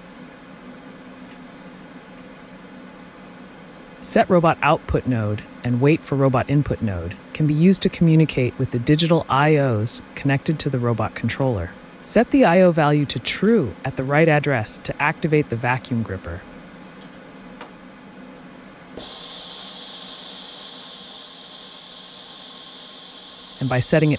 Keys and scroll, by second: 8.9 typing, 12.2 1, 13.4 1, 17.0 typing, 22.1 ctrl+d.